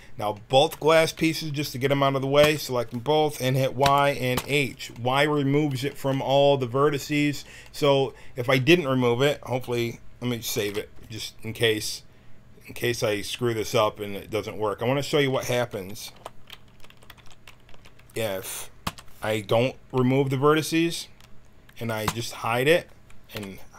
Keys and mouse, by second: 2.4 l, 3.8 y, 4.3 h, 5.0 middle click, 10.6 ctrl+s, 16.1 alt+h, 16.7 a, 16.8 a, 17.0 w, 17.6 a, 18.8 l, 22.0 h, 23.3 l.